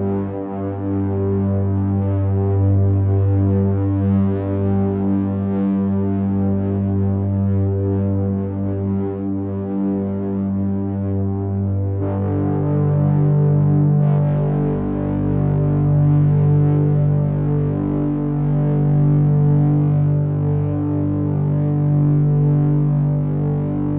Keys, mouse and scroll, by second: 3.5 click, 4.2 click, 5.8 click, 6.3 click, 11.1 click, 13.7 click, 20.2 click, 23.3 click.